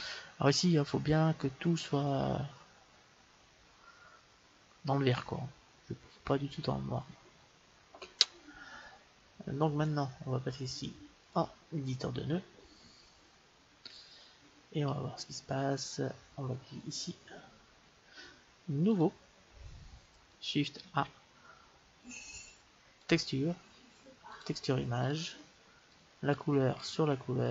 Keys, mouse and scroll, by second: 11.1-13.1 drag, 16.5-18.4 drag, 18.8-20.7 drag, 20.7 shift+a, 25.8-27.5 drag.